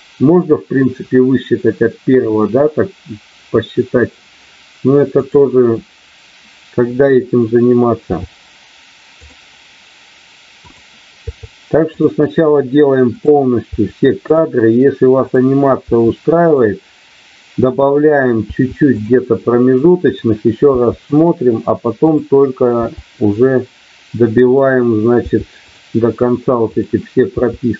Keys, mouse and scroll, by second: 5.1 click, 10.5 click, 13.1 click, 13.6 i, 15.2 click, 17.7 click, 20.1 click, 20.6 i, 22.0 click, 24.3 click, 25.1 i, 26.6 click, 27.3 i.